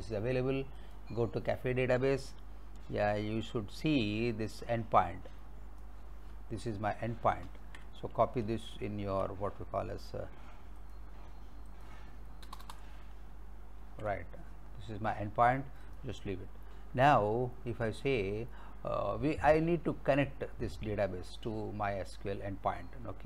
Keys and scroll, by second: 7.5 ctrl+c, 8.7 alt+Tab, 12.5 Return, 13.8 ctrl+v.